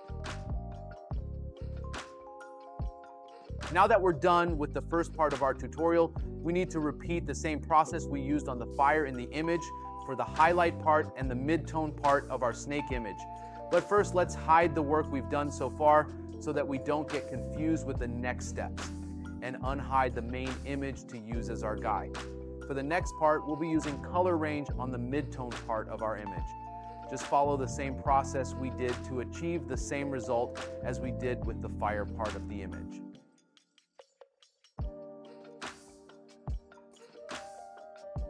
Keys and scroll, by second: 1.3 space, 5.3 space, 8.1 space, 23.2 space, 25.8 space, 34.7 space, 35.3 space.